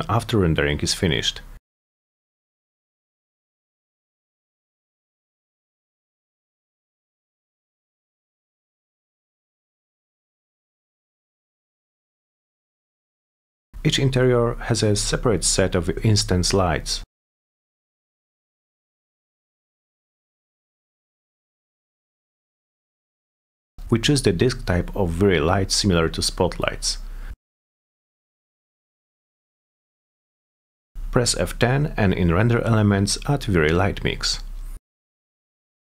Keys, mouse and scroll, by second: 1.5 click, 2.3 click, 3.0 click, 3.7 p, 4.2 z, 4.6-5.3 alt+middle drag, 5.5-6.0 middle drag, 6.2-6.8 alt+middle drag, 7.0-7.4 scroll down 4, 7.4-7.8 alt+middle drag, 7.9-9.0 alt+middle drag, 9.0-10.0 typing, 10.2 middle click, 10.4 middle drag, 10.8 middle click, 11.9 click, 12.7 click, 13.2 middle drag, 14.5 click, 14.8 middle click, 15.6 click, 16.2 click, 16.8-17.2 middle drag, 17.4 middle click, 17.7 middle click, 17.9 middle click, 18.5 middle click, 18.8 middle click, 19.5 middle click, 19.7 middle click, 20.0 middle click, 20.7 click, 21.1 click, 21.8 click, 25.6 middle click, 26.7 middle click, 27.2 c, 27.6 F3, 28.0 click, 28.4 F4, 28.8 F4, 30.1 click, 30.4 click, 30.7 click, 31.2 F10, 33.3 click, 35.1 click.